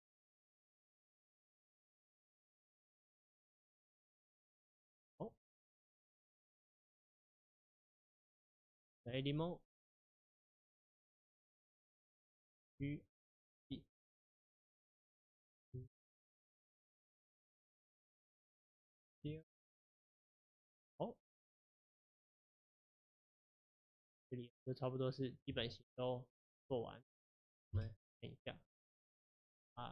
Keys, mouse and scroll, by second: 6.1 1, 6.6 click, 9.1 Tab, 11.2 shift+middle click, 11.4 scroll up 2, 11.8 click, 12.7 g, 15.0 click, 15.6 g, 19.3 s, 21.3 click, 23.1 g, 27.8 KP_Divide, 28.4-29.0 scroll down 1, 29.0 KP_Divide.